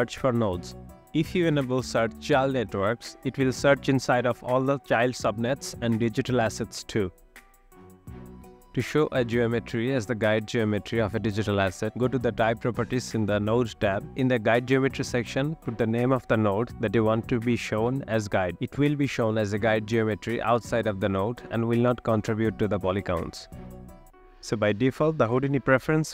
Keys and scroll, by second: 1.2-2.2 typing.